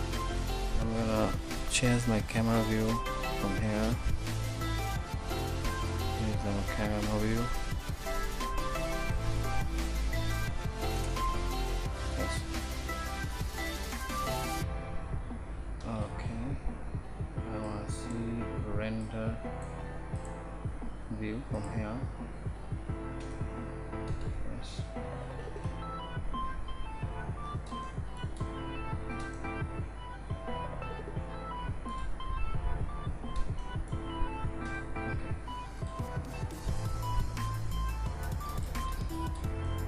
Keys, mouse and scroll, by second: 12.5 shift+z, 25.5 shift+z.